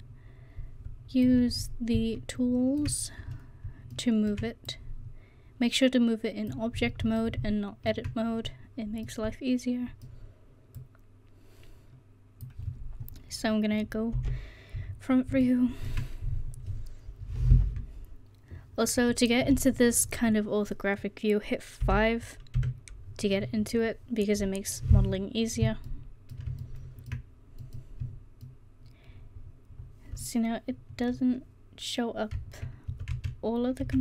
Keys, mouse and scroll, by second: 4.7-6.5 drag, 9.5-10.3 middle drag, 10.8-12.0 drag, 14.2 KP_1, 21.8 KP_5, 22.6 KP_5, 25.8 middle click, 30.5-34.0 middle drag.